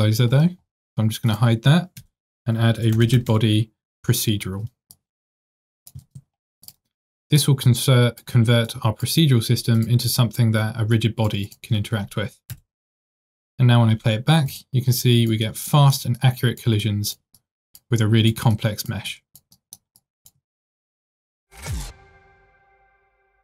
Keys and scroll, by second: 6.2 ctrl+r, 13.0 space.